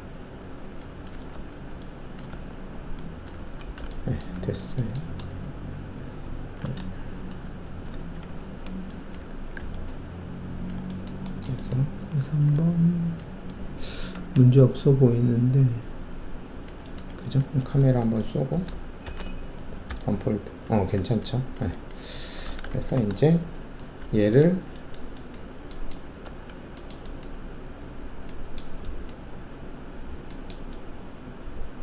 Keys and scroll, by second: 1.3 ctrl+alt+`, 2.3 ctrl+`, 3.3 ctrl+`, 4.3 alt+`, 5.4 alt+shift+q, 6.2 alt+shift+q, 7.6 alt+shift+q, 8.4 alt+1, 9.1 f, 11.9 alt+3, 14.1 alt+1, 17.6 alt+`, 19.0 ctrl+shift+c, 19.8 d, 22.4 alt+w, 23.4 shift+2, 26.2 alt+`.